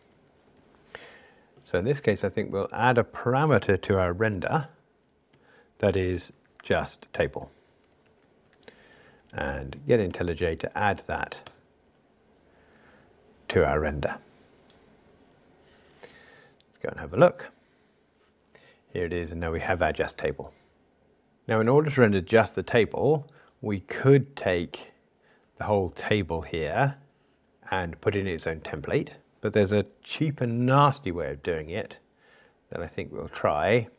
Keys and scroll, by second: 0.5 alt+shift+Right, 8.5 Escape, 10.1 alt+Return, 17.3 super+b.